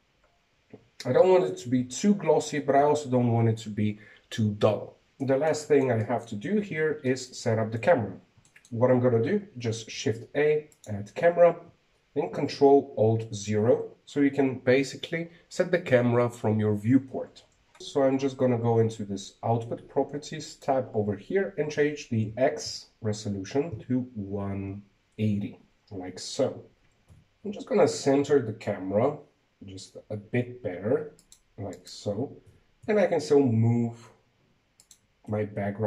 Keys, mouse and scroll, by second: 1.7-2.2 scroll up 2, 3.4 scroll down 5, 3.7 z, 3.8 z, 4.8 z, 5.1 KP_1, 5.6-5.9 scroll down 1, 5.9-8.5 middle drag, 8.5 scroll up 4, 9.1-12.0 shift+middle drag, 12.0 shift+a, 15.0 ctrl+alt+KP_0, 17.8 click, 18.6 click, 22.3-25.4 drag, 27.2-27.6 scroll down 3, 27.6 g, 33.6 right click, 34.3 g.